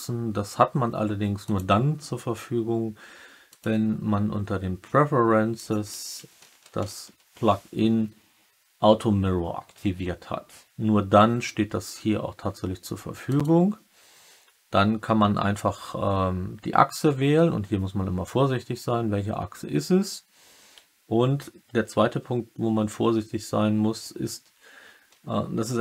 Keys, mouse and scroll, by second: 1.5-3.6 drag.